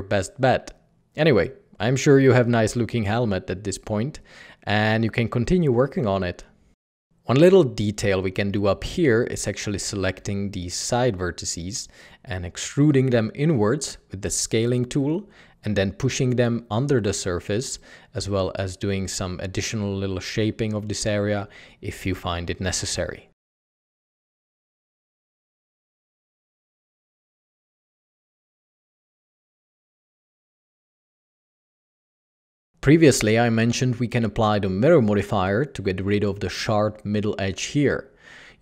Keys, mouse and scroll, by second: 4.0 Tab, 6.1 ctrl+è, 7.8 typing, 11.0 typing, 12.1 typing, 14.8 alt+a, 15.3-16.0 typing, 17.3 typing, 17.8 Escape, 18.1 Tab, 18.3 Tab, 18.8 Tab, 19.1 Tab, 20.4-22.7 typing, 22.5 Tab, 23.2 alt+a, 24.1 alt+a, 24.1 Tab, 24.3 g, 24.3 z, 25.6-27.3 typing, 26.4 Escape, 28.2 Escape, 28.4 Tab, 29.2 alt+a, 33.2 alt+a, 33.3 Tab.